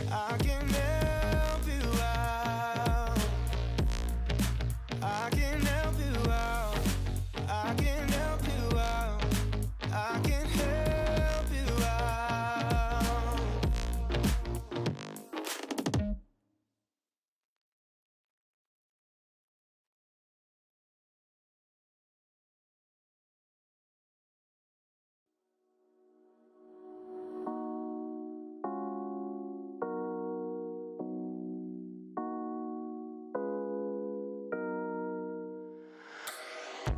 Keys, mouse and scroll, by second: 0.1 click, 0.4-1.3 shift+middle drag, 1.3-2.0 scroll down 2, 2.0-3.2 middle drag, 3.2 alt+z, 3.4 click, 3.8 alt+z, 4.1 g, 5.0 click, 5.6 Tab, 6.7-7.2 drag, 7.2 middle click, 7.5 Tab, 7.7 shift+middle click, 7.9-8.7 scroll up 8, 8.7-9.9 middle drag, 9.9 KP_3, 10.2 shift+middle click, 10.4 scroll up 5, 10.7 alt+z, 11.5 middle click, 11.7-12.0 scroll up 1, 12.0 KP_3, 12.2 shift+middle drag, 12.5 ctrl+r, 16.2 shift+middle click, 16.4 scroll up 2, 16.6 1, 17.0 click, 17.7 g, 19.5 click, 19.9 shift+middle click, 20.0 scroll up 2, 20.3 g, 22.2-22.6 scroll down 4, 22.6 ctrl+r, 27.2 click, 28.0 g, 29.7 3, 30.1 click, 31.1 x, 33.2-33.9 scroll down 2, 33.9 middle click, 34.3 scroll down 4, 34.4 alt+z, 34.7-36.9 middle drag.